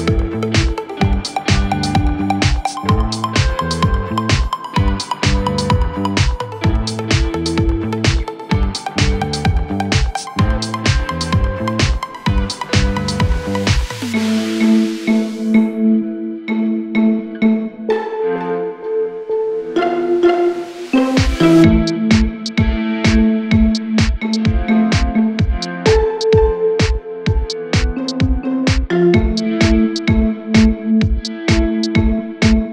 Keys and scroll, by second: 5.4 F3, 6.4 Escape, 7.3 shift+F2, 7.6 Escape, 11.5 ctrl+z.